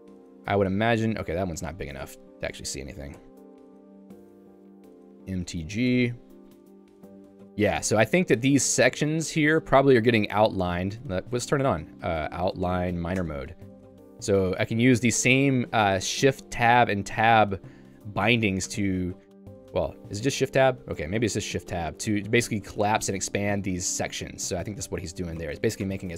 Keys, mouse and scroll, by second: 1.0 ctrl+u, 2.1 super+e, 3.5-6.2 typing, 6.7 ctrl+d, 7.0 ctrl+d, 8.2 j, 13.2 Return, 14.4 shift+Tab, 15.1 k, 16.1 j, 17.7 h, 18.3 Home, 18.7 Tab, 19.2-20.7 typing, 21.6 shift+Tab, 22.2 k, 22.6 shift+Tab, 23.0 shift+Tab, 23.3-24.6 typing, 25.9 Return.